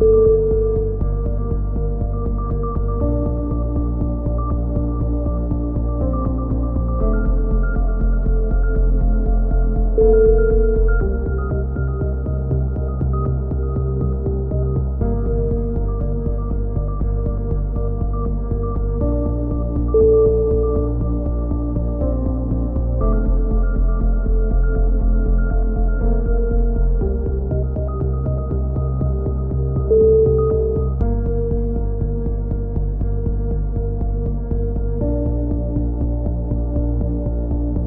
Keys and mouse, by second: 2.0 s, 7.3-8.9 drag, 8.8 a, 8.9 middle click, 9.3 z, 10.1 click, 12.1 KP_3, 13.0 z, 13.5 z, 13.8 click, 14.4 right click, 14.9 KP_1, 15.3 middle click, 15.4 click, 16.4 click, 17.3 click, 17.9 ctrl+z, 18.4-19.8 drag, 20.9 click, 22.2 a, 22.3 z, 22.5 middle click, 22.9 z, 23.4 click, 24.3 KP_3, 25.1 z, 27.8 KP_7, 29.5 middle click, 30.4-31.9 drag, 31.0 right click, 31.5 a, 31.9-33.0 middle drag, 32.0 z, 35.3 click.